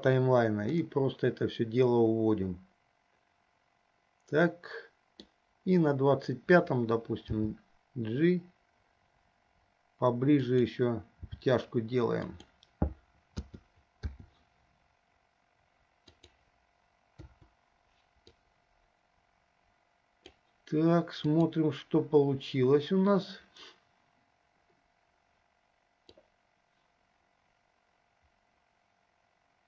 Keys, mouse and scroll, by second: 1.1-5.6 middle drag, 7.4 g, 11.6 g, 13.9 a, 14.6 i, 17.5 Delete, 18.8-20.8 drag, 21.7 drag, 26.3-29.6 drag.